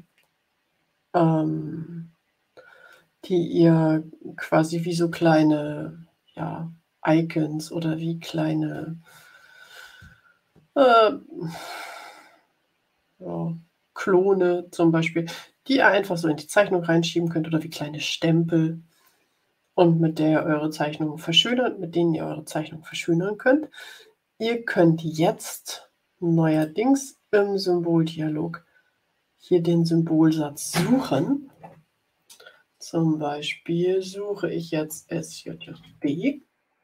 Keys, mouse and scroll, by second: 26.4 click, 34.8 s, 35.2 j.